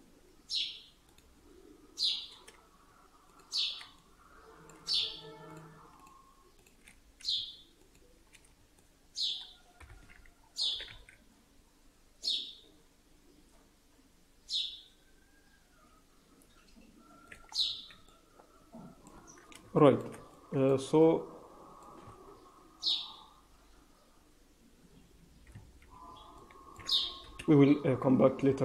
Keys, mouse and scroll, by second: 1.0 click, 3.2 shift+click, 3.9 middle click, 5.4 shift+click, 5.9 shift+click, 7.7 shift+click, 8.3 scroll down 4, 8.7 middle click, 9.7 KP_1, 10.3-11.5 scroll up 3, 10.6 s, 17.4-17.9 scroll down 3, 17.7 Tab, 17.9 middle click, 19.1 Tab, 19.7 shift+middle click, 20.1 Tab, 20.7 click, 20.9 middle click, 22.0 Tab, 22.2-23.1 scroll up 4, 25.4-26.1 scroll down 8, 25.6 Tab, 26.3 alt+middle click, 27.1 KP_1, 27.6-28.6 scroll up 6, 28.5 Tab.